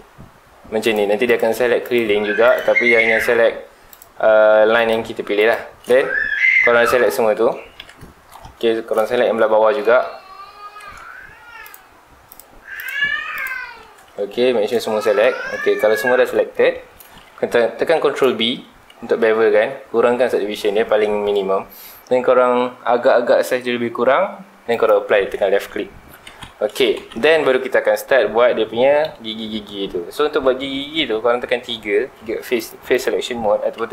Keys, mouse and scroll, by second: 0.8 ctrl+alt+shift+click, 1.2 ctrl+alt+shift+click, 1.8 ctrl+alt+shift+click, 2.4 ctrl+alt+shift+click, 3.9 ctrl+alt+shift+click, 4.7 ctrl+alt+shift+click, 5.3 ctrl+alt+shift+click, 6.7 scroll down 2, 6.8 middle click, 7.8 KP_Decimal, 8.3 scroll up 2, 8.7 scroll down 1, 9.1 shift+middle click, 9.3-9.7 shift+scroll up 3, 9.7 middle click, 10.5 scroll up 1, 11.6 ctrl+alt+shift+click, 12.3 ctrl+alt+shift+click, 12.7 ctrl+alt+shift+click, 13.3 ctrl+alt+shift+click, 14.0 z, 14.5 middle click, 15.4 z, 15.7 scroll down 2, 15.9 middle click, 16.4-16.7 scroll up 2, 16.7-17.9 shift+middle drag, 17.9 ctrl+b, 24.8 shift+click, 26.0 alt+a, 26.3 Tab, 26.7 alt+a, 26.9 scroll down 2, 27.0 Tab, 27.3 scroll up 2, 27.5 middle click, 28.2-28.7 scroll up 2, 28.7-31.7 middle drag, 32.0 3, 32.6 click, 32.9 click, 33.7 3.